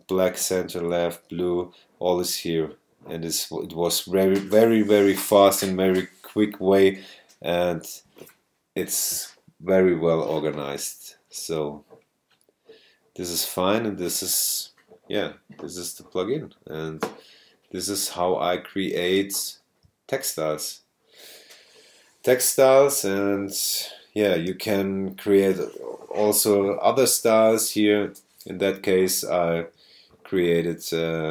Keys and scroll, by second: 19.2 super+space, 23.2 super+space, 24.5 super+space, 25.3 space, 28.9 super+space, 29.6 space.